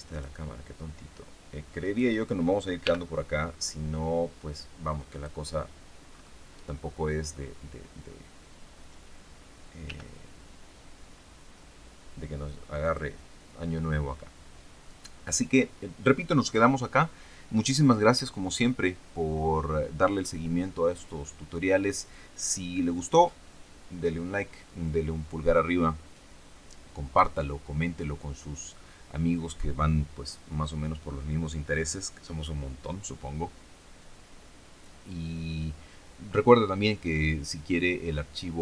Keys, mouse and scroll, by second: 0.0 right click, 1.8 right click, 2.7 g, 2.9 click, 5.0 click, 6.0-6.7 scroll up 1, 6.7-7.2 scroll up 1, 7.2-7.6 scroll down 1, 9.8 g, 12.8 click.